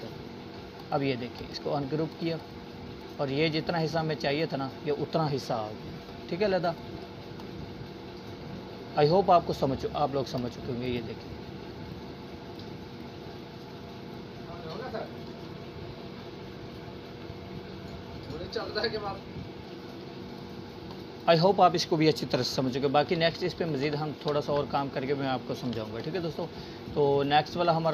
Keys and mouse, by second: 2.2 right click, 2.9-5.2 drag, 16.9 click, 19.4 ctrl+z, 22.1 Delete, 23.8 click, 25.3-26.3 alt+shift+drag.